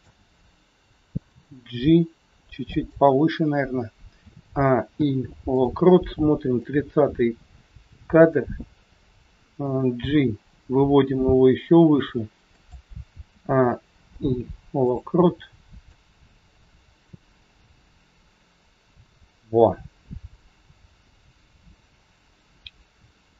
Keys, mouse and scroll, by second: 2.7 g, 4.1 a, 4.8 i, 6.5 click, 12.6 g, 13.3 a, 14.0 i, 15.8 click.